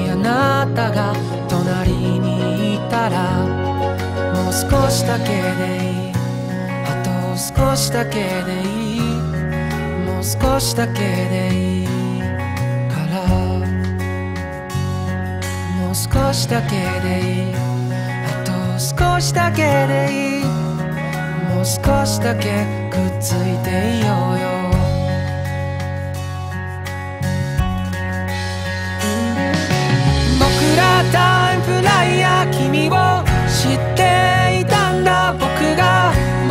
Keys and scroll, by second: 2.3 ctrl+z, 2.7 ctrl+z, 3.4 ctrl+z, 4.5 ctrl+z, 4.7 ctrl+z, 5.2 ctrl+z, 5.5 ctrl+z, 7.1 ctrl+z, 7.6 ctrl+z, 7.8 ctrl+z, 9.1 ctrl+z, 9.7 ctrl+z, 13.0 ctrl+z, 14.3 ctrl+z, 15.9 ctrl+z, 16.7 ctrl+z, 16.9 ctrl+z, 17.2 ctrl+z, 17.6 ctrl+z, 18.4 ctrl+z, 20.4 ctrl+z, 23.9 ctrl+z, 26.6 ctrl+z, 27.7 ctrl+z, 30.4 ctrl+z, 30.9 ctrl+z, 31.7 ctrl+z, 33.1 ctrl+z, 34.2 ctrl+z, 34.8 ctrl+z, 36.2 ctrl+z.